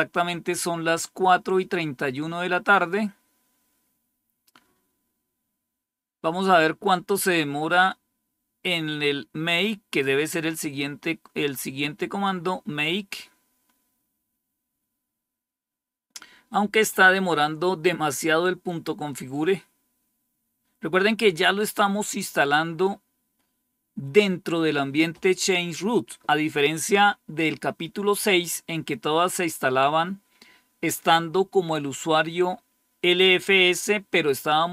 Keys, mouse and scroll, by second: 9.3-9.8 scroll down 1.